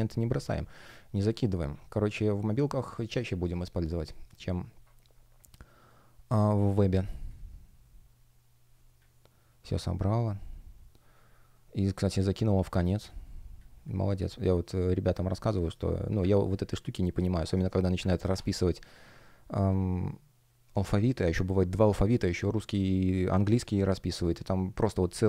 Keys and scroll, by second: 6.8 space, 12.8 space.